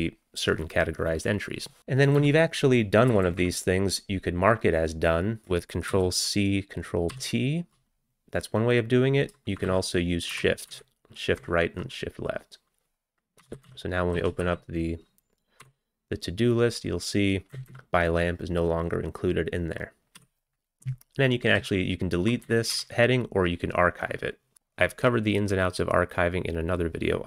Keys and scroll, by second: 1.8 q, 2.2 Down, 3.1 Up, 3.3 Up, 3.4 Up, 6.0 ctrl+c, 7.1 ctrl+t, 9.7 shift+Left, 10.3 shift+Right, 10.7 shift+Left, 11.4 shift+Right, 13.5 ctrl+x, 13.7 ctrl+s, 14.2 ctrl+c, 14.4 a, 15.6 t, 17.5 Down, 17.7 Down, 20.2 q, 21.4-24.5 typing.